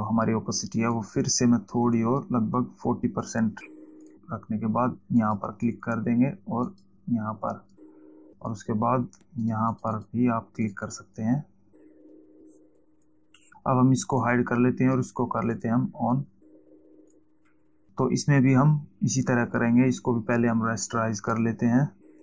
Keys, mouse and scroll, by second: 1.5 click, 5.7 click, 7.1 shift+click, 8.0 click, 9.3 click, 13.1 click, 14.7 click, 16.1 click, 17.4 click, 19.7 right click, 21.4 click.